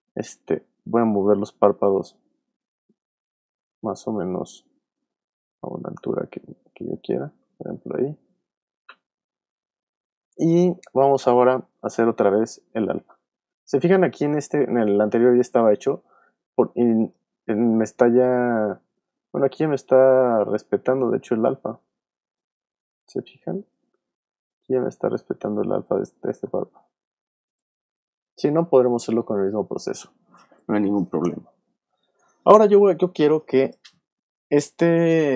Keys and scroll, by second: 0.4 v, 3.7 v, 21.1 v, 21.6 shift+v, 22.6 shift+super+z, 23.5 super+z, 26.5 shift+super+z, 27.5 super+z.